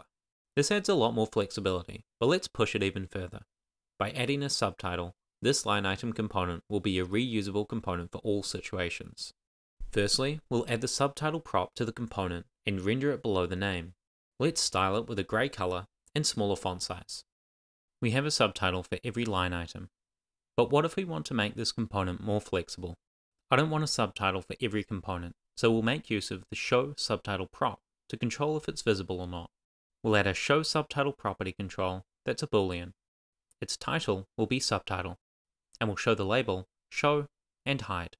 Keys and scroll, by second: 0.0-0.2 typing, 0.2 super+s, 17.5 Return, 29.3-32.1 typing, 30.2 Return, 32.3 Tab, 33.1 Return, 33.6 shift+;, 34.0 shift+s, 35.2 Right, 35.9 Return, 36.4 Tab, 36.7 shift+;, 36.7 shift+space, 37.9 shift+s.